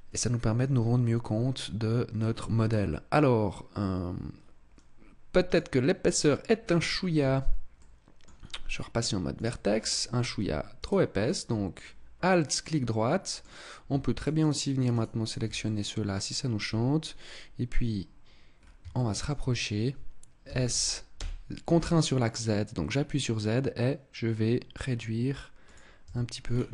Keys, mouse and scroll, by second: 6.0 click, 6.5-6.9 scroll up 6, 7.1 Tab, 7.6 middle click, 9.2 click, 9.7 scroll up 2, 10.7 alt+right click, 11.7 middle click, 14.0 shift+right click, 14.3 shift+right click, 14.8 shift+right click, 15.1 shift+right click, 15.5 middle click, 18.4 scroll up 2, 18.8 shift+middle click, 19.4-20.1 scroll up 1, 20.1 scroll up 1, 20.3 s, 25.6 click, 25.9 Tab, 26.2 scroll down 8.